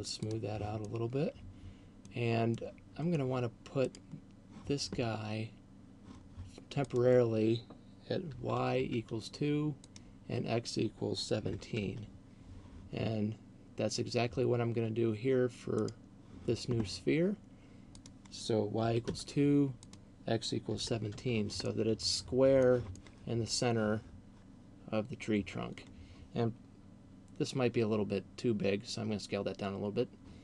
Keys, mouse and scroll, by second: 0.0 click, 1.0 middle click, 2.5 middle click, 4.0 right click, 6.7 click, 9.7 click, 16.0 right click, 18.0 click, 19.7 click, 21.7 middle click, 23.2 middle click.